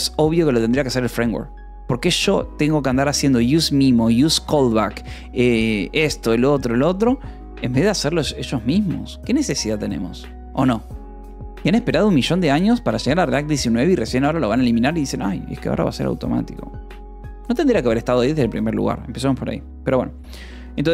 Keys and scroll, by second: 20.5 j.